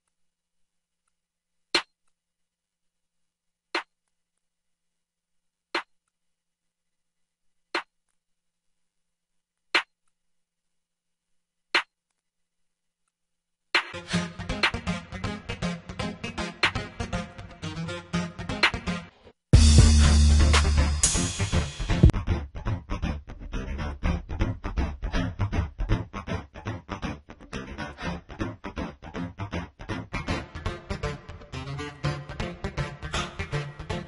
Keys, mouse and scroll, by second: 0.0 space, 19.8-21.4 drag, 29.2-29.6 right drag, 32.0 click.